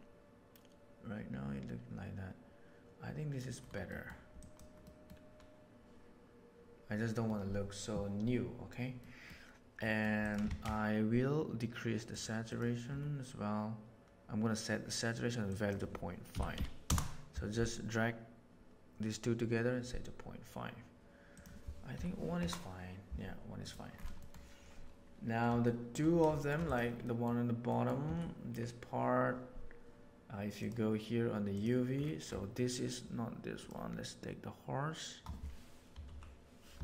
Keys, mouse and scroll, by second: 2.4 click, 3.9 middle click, 4.3 click, 4.9 middle click, 9.0 middle click, 9.7 middle click, 10.1 click, 10.4 shift+a, 15.5-17.5 drag, 21.3-23.3 drag, 24.2 middle click, 25.6 shift+middle drag, 26.3 shift+middle click, 26.6 right click, 26.9 middle click, 27.6 middle click, 27.7 click, 28.0 Tab, 30.6 click, 33.5 click.